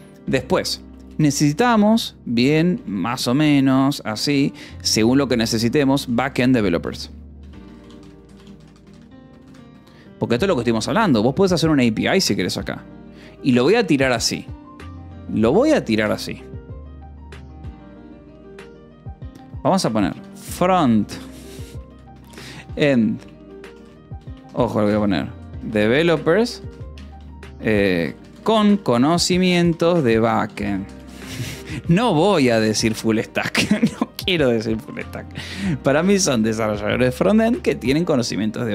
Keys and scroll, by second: 1.3 shift+u, 2.6 BackSpace, 5.4-9.7 typing, 13.5 a, 13.6 space, 16.7 Return, 17.3 -, 17.4 space, 19.3-33.4 typing, 33.0 Escape, 35.1 h, 36.0 r, 36.6 Escape, 37.6 ctrl+s.